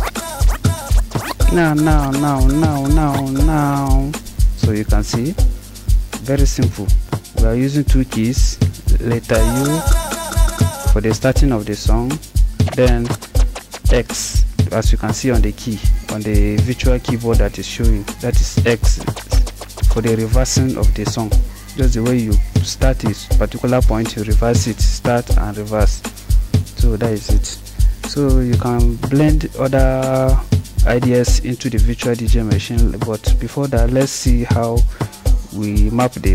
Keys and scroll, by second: 0.0-3.9 typing, 8.8-11.4 typing, 12.6-13.8 typing, 18.6-19.7 typing.